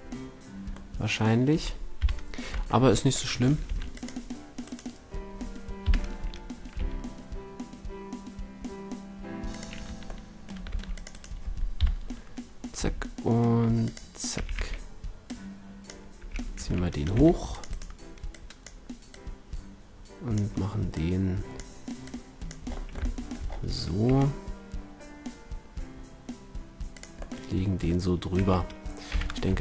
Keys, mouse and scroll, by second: 1.9 KP_3, 2.4 Tab, 3.6 ctrl+r, 5.8 KP_3, 6.5 middle click, 6.7 g, 10.2 middle click, 10.6 ctrl+r, 11.7 KP_3, 12.7 g, 13.1 click, 14.2 a, 14.4 a, 16.1 a, 16.6 v, 17.0 c, 18.2-19.7 drag, 20.8 click, 20.9-22.6 middle drag, 22.6 click, 22.7-24.0 middle drag, 24.0 e, 27.0-27.5 drag, 27.6-28.7 drag, 28.3 a, 29.0 z, 29.4 Tab.